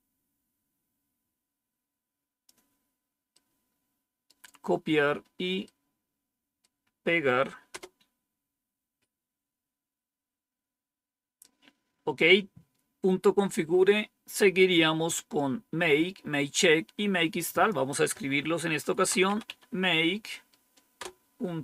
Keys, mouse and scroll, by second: 3.3 right click, 5.6 right click, 7.6 Return, 13.1-14.0 scroll down 1, 14.6-15.4 scroll down 1, 17.5 click, 18.6-19.9 typing, 20.9 Return.